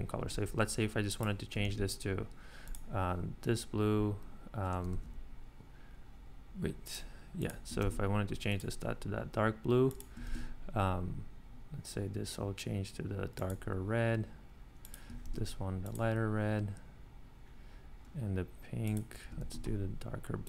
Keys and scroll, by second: 1.6 ctrl+c, 4.9 super+z, 7.8 ctrl+c, 10.2 ctrl+c, 15.3 ctrl+c, 19.4 ctrl+c.